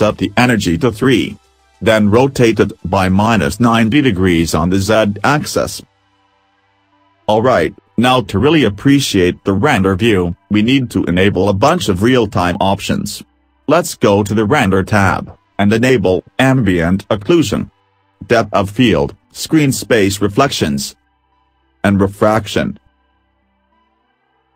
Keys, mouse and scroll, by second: 2.9 r.